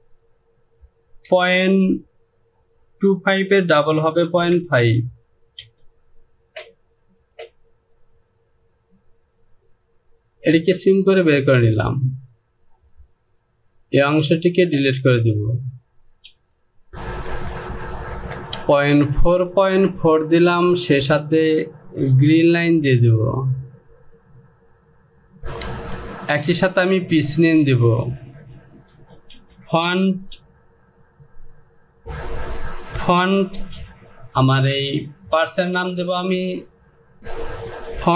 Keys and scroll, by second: 5.6 Return, 16.4 Delete, 17.3 Down, 18.1 Down, 18.5 Down, 22.2 Return, 25.4 Home, 25.6 e, 29.8 space.